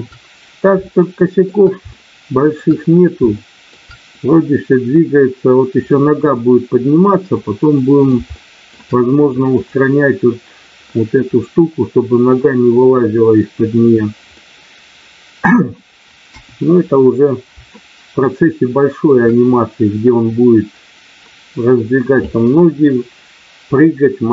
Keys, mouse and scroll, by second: 0.8 shift+middle click, 1.9 shift+middle click, 3.4 shift+middle click, 5.9 middle click, 7.3 middle click, 8.3 shift+middle click, 14.4 middle click, 16.3 KP_1, 17.7-19.0 shift+middle drag.